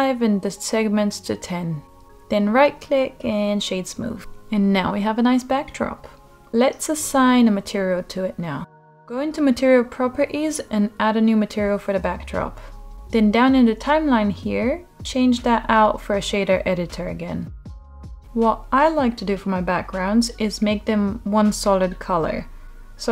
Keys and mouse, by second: 2.2-3.8 right drag, 3.8-4.7 middle drag, 6.1-7.8 middle drag, 9.1 middle click, 10.4 click, 11.4 click, 12.3 click, 12.4-15.1 drag, 15.2 click, 19.2-20.7 drag, 20.8 click.